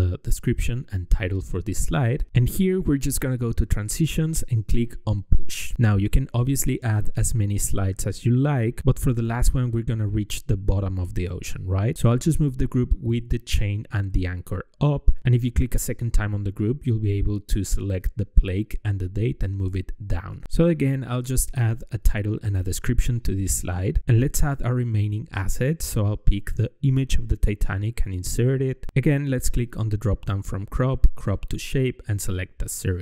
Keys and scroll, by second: 7.6 ctrl+d, 11.1 BackSpace, 19.5 ctrl+v.